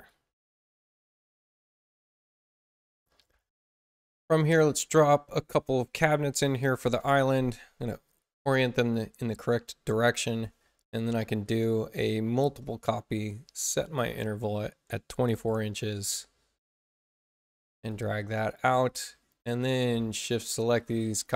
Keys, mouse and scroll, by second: 6.7 click, 7.1 click, 8.0-9.1 drag, 12.2 k, 12.9 ctrl+k, 14.0 click, 15.1-15.9 typing, 16.6-17.8 drag, 19.5 shift+click, 20.7 ctrl+alt+c.